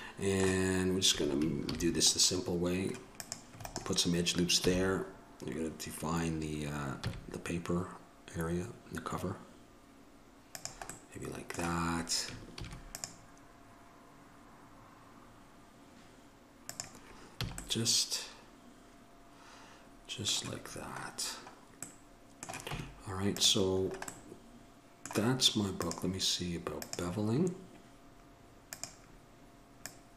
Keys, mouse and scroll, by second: 1.9 ctrl+r, 4.8 s, 11.4-16.2 middle drag, 12.7 ctrl+r, 17.6 a, 17.9-19.9 middle drag, 21.6-22.9 middle drag, 22.9 Tab, 26.4-30.1 drag.